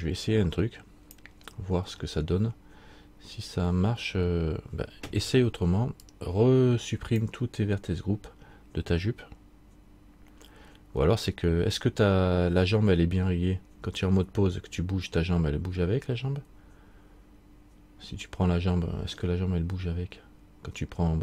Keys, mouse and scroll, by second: 2.0-2.6 scroll down 1.